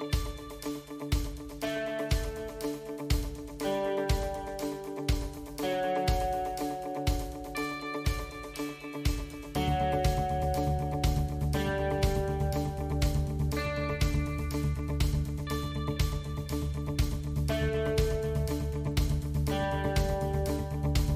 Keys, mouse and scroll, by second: 0.6 click, 6.7 KP_7, 8.1 ctrl+r, 14.6 ctrl+r, 20.0 2.